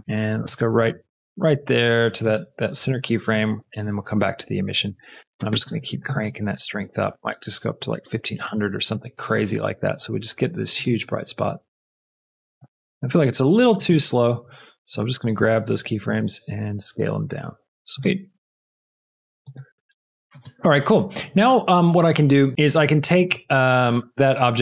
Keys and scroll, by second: 7.8 KP_1, 7.9 KP_5, 8.1 KP_0, 8.5 Return, 10.9 space, 12.9 space, 16.0 shift+s, 20.3 space, 23.3 space.